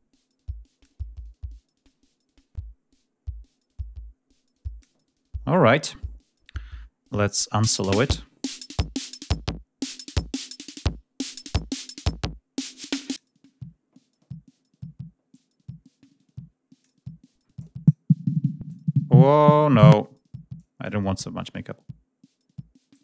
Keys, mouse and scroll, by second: 0.6-2.5 drag, 7.4 click, 8.9 click, 9.9 click, 12.9 click, 15.1-16.8 drag, 17.4 click, 18.5-19.4 drag, 19.5 click, 20.4-22.9 drag.